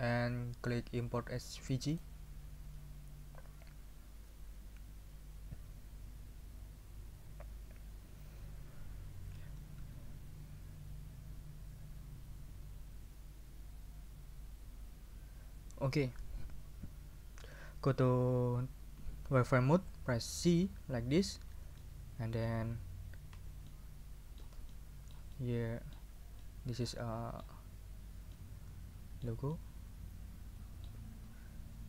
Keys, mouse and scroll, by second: 1.9 click, 20.7 z, 21.8 middle click, 23.7 ctrl+middle click, 24.7-26.1 ctrl+shift+middle drag, 26.4-27.6 shift+middle drag, 28.3-29.4 middle drag, 29.5-31.0 ctrl+middle drag.